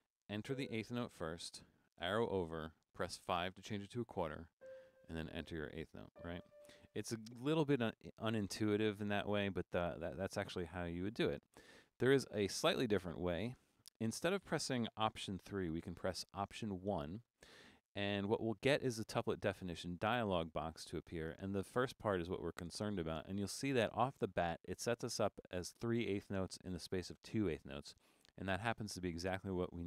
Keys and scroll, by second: 1.0 4, 2.0 Left, 3.0 5, 5.1 4, 6.2-7.0 typing, 16.9 alt+1.